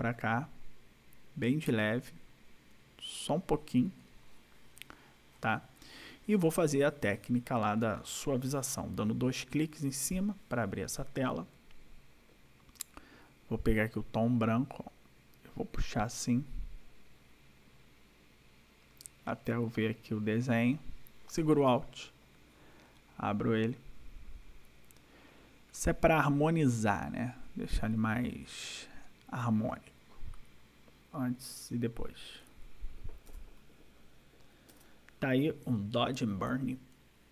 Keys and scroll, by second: 33.3 ctrl+-, 34.7 ctrl+-.